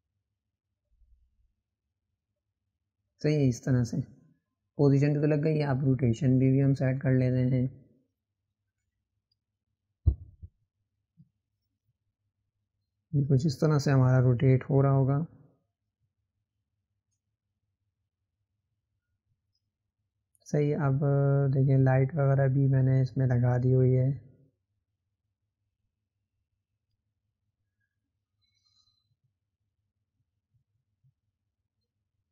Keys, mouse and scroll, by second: 5.7-11.0 drag, 11.0-18.5 right drag, 18.5 click, 21.2-24.4 middle drag, 24.4 click, 28.5-31.4 drag.